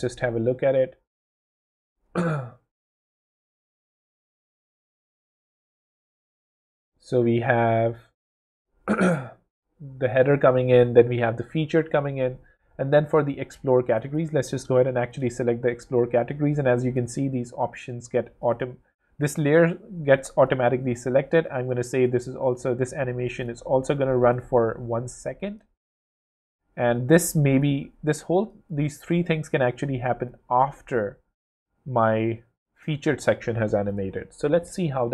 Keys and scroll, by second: 0.8 w, 5.0 0, 6.3 w, 18.8 super+z, 27.9 super+z, 34.0 w.